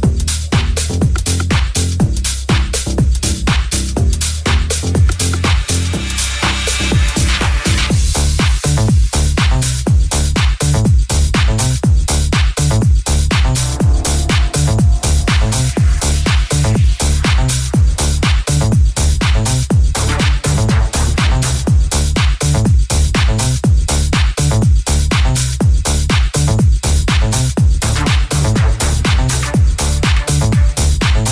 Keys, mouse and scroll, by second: 0.7 shift+right click, 2.8 middle click, 3.1 right click, 3.1-4.9 shift+middle drag, 4.9 right click, 5.0 ctrl+middle click, 5.8 shift+right click, 5.9 shift+middle click, 6.7 shift+click, 6.7 shift+middle click, 6.9 shift+click, 6.9-19.6 shift+middle drag, 7.8 g, 10.2 right click, 11.9 /, 17.4 g, 19.6 right click, 19.6-25.7 middle drag, 24.4 right click, 25.7 right click, 25.8-27.5 middle drag, 27.5 click, 27.6-28.6 middle drag, 28.6 click, 28.7-29.7 shift+middle drag, 29.7 right click, 29.7-31.3 middle drag.